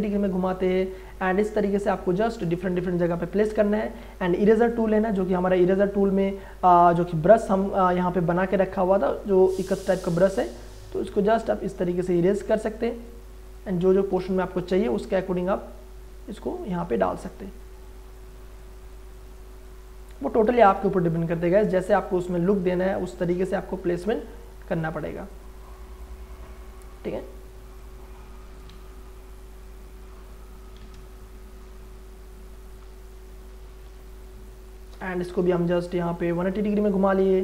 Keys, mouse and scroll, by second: 2.9 Return, 3.4 e, 4.7 click, 8.6 click, 8.8 click, 9.3 alt+right click, 10.2-12.1 drag, 14.1 v, 15.1-17.2 drag, 17.2 e, 17.6 click, 20.8 v, 22.0-24.8 drag, 24.8 e, 25.3 click, 27.0 v, 27.8 click, 28.6 ctrl+z, 29.6 click, 30.8 ctrl+z, 30.9 ctrl+space, 31.1 ctrl+click, 31.5 ctrl+space, 32.7 click, 33.9 alt+click, 35.2 ctrl+t, 35.4 ctrl+right click, 36.3-37.4 ctrl+drag.